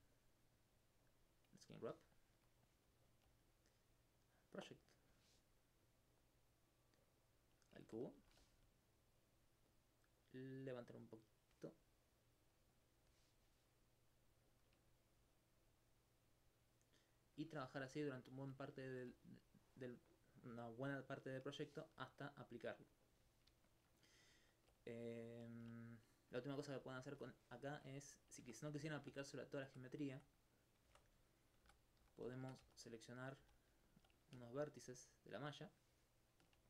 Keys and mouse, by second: 3.5-7.1 drag, 9.2 shift+click, 11.8 middle click, 12.7 click, 14.9 shift+click, 17.9 alt+click, 18.3 alt+click, 18.9 alt+click, 21.4 middle click, 26.5 alt+click, 32.4 ctrl+Tab, 32.6 ctrl+1, 33.4 ctrl+z, 33.9 alt+click, 34.3-36.2 drag.